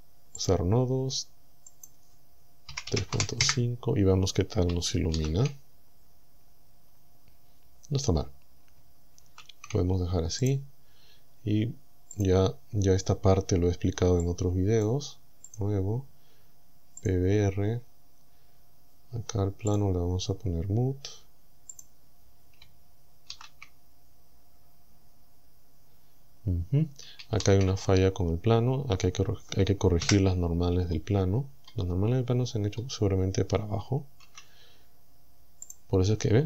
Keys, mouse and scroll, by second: 0.4 click, 1.7 click, 2.9 KP_Decimal, 3.3 KP_5, 3.5 KP_Enter, 5.2 shift+z, 9.3 shift+z, 10.5 right click, 12.2 click, 14.3 click, 15.5 click, 17.1 click, 17.6-18.0 scroll down 2, 19.1 scroll down 2, 19.4 middle click, 19.7 click, 21.8 click, 23.3 shift+z, 27.4 shift+z, 30.1 KP_1, 30.9 scroll up 2, 31.4-31.9 scroll down 4, 32.3 scroll down 2, 32.6 scroll up 2, 34.3 Tab, 35.7 click.